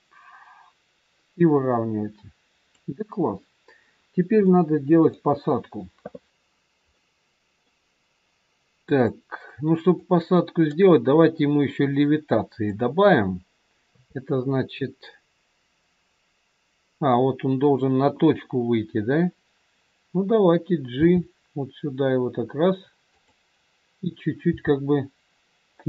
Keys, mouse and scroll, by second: 4.4 middle click, 6.5 scroll up 2, 6.8 middle click, 10.0 click, 13.9 KP_3, 16.0-16.9 scroll down 2, 21.0 g, 24.3 g.